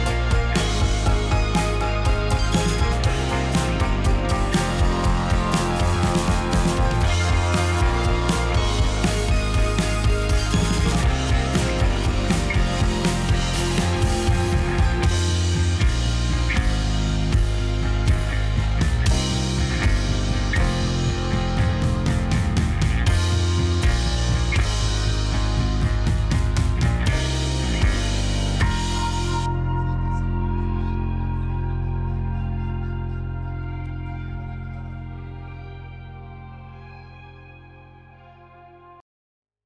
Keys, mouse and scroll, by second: 1.2 shift+a, 1.9 s, 2.3 s, 2.7 s, 3.6-5.1 scroll down 6, 5.3 g, 6.3 click, 6.5-6.9 scroll up 3, 6.9-7.5 middle drag, 7.5-8.5 scroll up 1, 9.7 shift+a, 11.8 g, 13.4 g, 16.3-17.3 drag, 17.4 click, 17.8 click, 17.9 click, 18.8 KP_0, 19.3-19.8 scroll down 4, 20.4-24.6 shift+middle drag, 25.2 click, 25.4 click, 25.7-26.7 drag, 26.9 click, 27.4 click, 27.6 drag, 27.8-29.6 drag, 30.1 click, 32.3-33.3 drag, 33.4-33.9 scroll down 7, 33.9 drag, 34.3 click, 36.1-37.7 scroll up 10, 38.7 click.